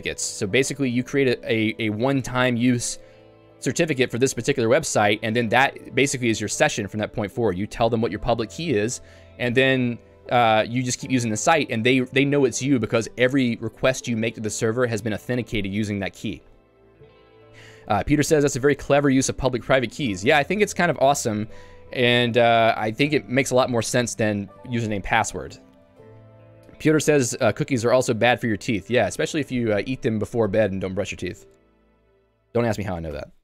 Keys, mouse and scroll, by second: 17.4 Escape, 26.6 Escape, 32.3 j.